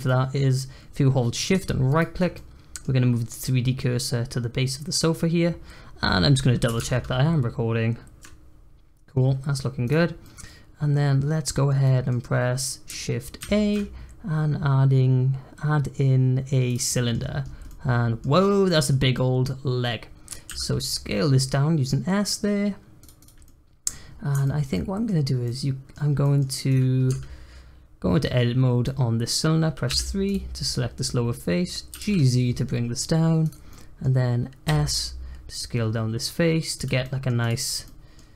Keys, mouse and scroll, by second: 1.9-2.3 shift+right drag, 2.3-5.4 middle drag, 10.2-13.4 middle drag, 13.4 shift+a, 16.9 middle click, 17.2-17.6 scroll down 4, 17.6-18.3 middle drag, 18.3 scroll up 1, 18.6-20.5 middle drag, 20.5 s, 23.2 click, 23.4-24.0 middle drag, 24.0-24.4 scroll up 2, 24.4-25.2 shift+middle drag, 25.2 scroll down 1, 25.4 middle click, 25.9-26.2 scroll up 1, 26.2 middle click, 26.6 click, 27.0 Tab, 28.8-29.9 middle drag, 29.9 3, 30.2 click, 31.9 g, 33.7 middle click, 34.6 s, 37.0 middle click, 37.4 click, 37.6 scroll down 1, 37.8 middle click, 38.2 scroll down 1.